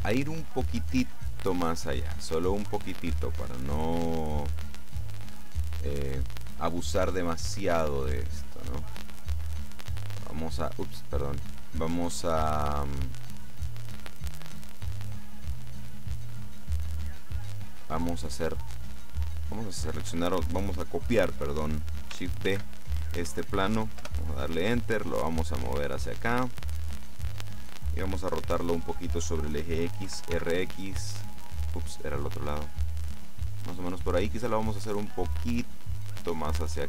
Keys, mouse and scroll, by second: 2.1 click, 9.4 click, 10.6 click, 12.0 click, 12.9 click, 19.0 middle click, 19.9 right click, 22.6 shift+d, 24.1 Return, 25.5-28.0 drag, 30.1 r, 30.4 x, 33.6 click, 35.0-35.6 scroll down 2, 35.9-36.8 drag.